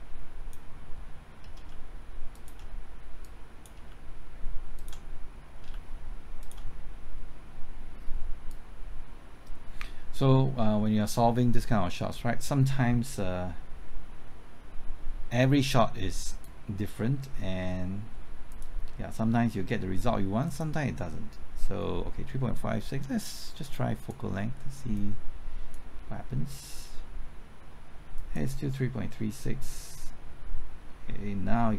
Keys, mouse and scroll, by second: 1.7-2.3 shift+s, 2.3 shift+click, 3.2 click, 3.9-4.6 shift+s, 5.7-6.4 typing, 8.5-31.7 drag.